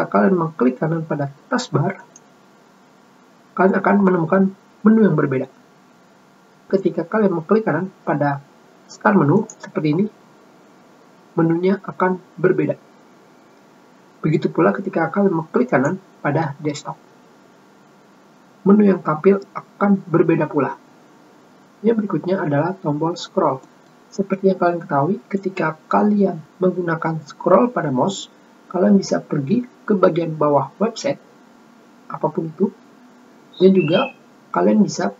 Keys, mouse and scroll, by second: 2.8 right click, 10.2 right click, 16.5 right click, 29.3-30.3 scroll down 4, 31.0-31.3 scroll down 2, 31.7-32.1 scroll down 4, 32.7-33.5 scroll down 6.